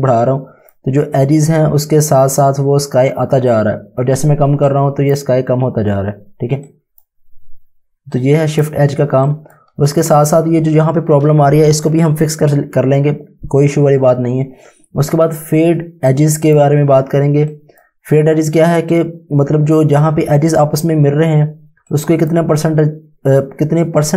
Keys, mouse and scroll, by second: 4.7 click, 16.1 click, 21.9 click.